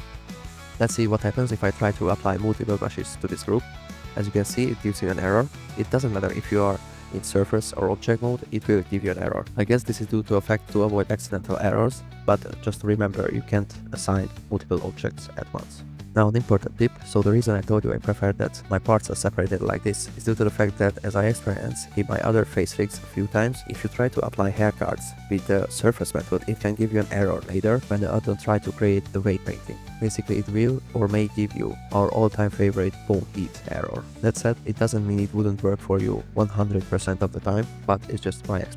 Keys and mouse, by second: 0.7 drag, 2.5 shift+click, 4.4 click, 5.2 click, 7.0 drag, 9.0 middle click, 9.6 click.